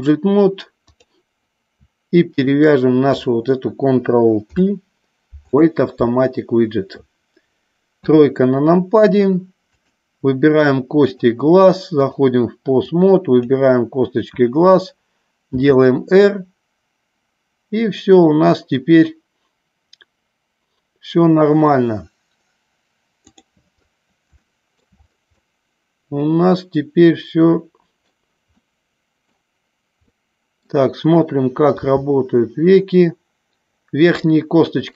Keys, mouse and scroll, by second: 2.4 shift+click, 4.4 ctrl+p, 8.1 KP_3, 9.9 click, 11.2-12.4 drag, 13.0 click, 15.7 r, 23.3 click, 24.5 shift+middle click, 25.5-28.2 middle drag, 28.7 middle click, 30.1 middle click, 31.9 g.